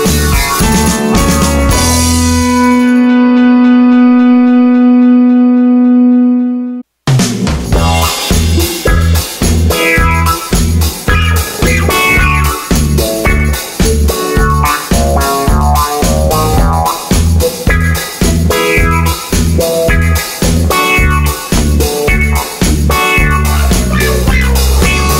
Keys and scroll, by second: 0.9 d, 6.5 BackSpace, 6.7 BackSpace, 10.0 BackSpace, 19.7 super+c.